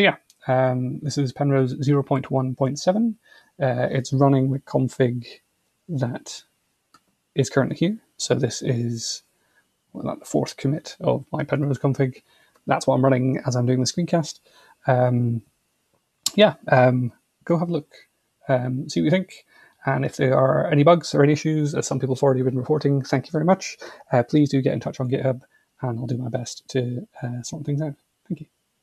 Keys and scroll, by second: 4.7 super+2.